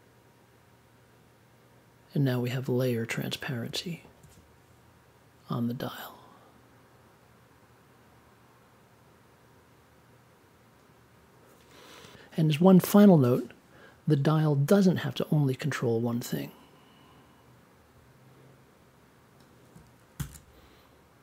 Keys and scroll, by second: 20.1 shift+super+e.